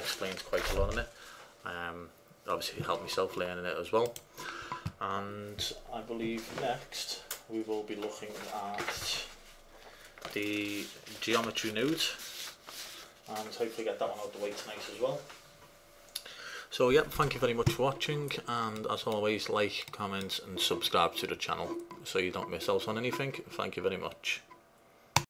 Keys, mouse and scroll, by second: 18.2-18.9 middle drag.